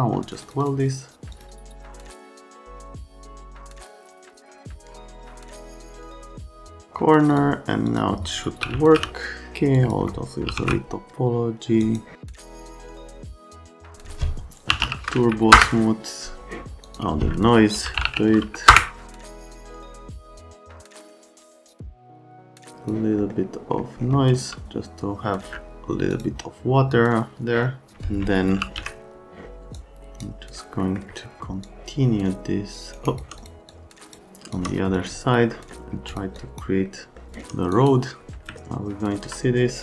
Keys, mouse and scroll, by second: 0.2 middle click, 0.4 middle click, 0.6 middle click, 1.3 middle click, 1.9-2.3 scroll down 2, 2.4 scroll up 1, 3.5 middle click, 4.4 middle click, 5.1 middle click, 5.2 right click, 5.5 ctrl+a, 5.7 alt+right click, 6.2 right click, 6.4 ctrl+a, 6.7 click, 7.3 click, 7.9 click, 8.5-11.1 typing, 9.8 click, 11.8 click, 12.2 right click, 12.8 click, 13.9 click, 14.4-15.3 typing, 15.5 Return, 16.9 click, 17.6-18.5 typing, 18.7 Return, 19.0 click, 19.6 Escape, 20.2 F3, 21.1 middle click, 22.0 click, 23.2 middle click, 24.3 v, 25.4 F3, 25.4 F4, 28.3-29.3 typing, 29.7 click, 30.8 right click, 31.6 shift+click, 33.4 click, 33.7 click, 34.6 shift+right click, 35.1 alt+middle click, 35.3-36.2 typing, 35.5 middle click, 36.4 click, 36.9 click, 37.3 click, 38.3 click, 38.5 right click, 38.7 click, 38.8 click, 39.1 right click, 39.4 shift+middle click.